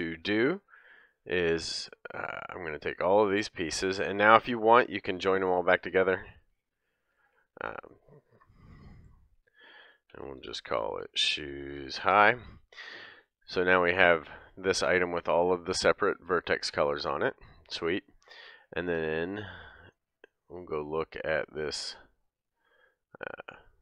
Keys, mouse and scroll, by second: 0.8-2.8 middle drag, 2.8-5.5 drag, 3.8 middle click, 5.5-14.3 shift+middle drag, 7.1 ctrl+j, 9.3 F2, 14.3 click, 14.4-19.7 middle drag, 19.7 click, 19.7 scroll down 1, 19.8 middle click, 20.7 click, 20.8-22.1 middle drag, 22.1 click, 22.2 middle drag, 22.5 click, 22.5-23.8 middle drag.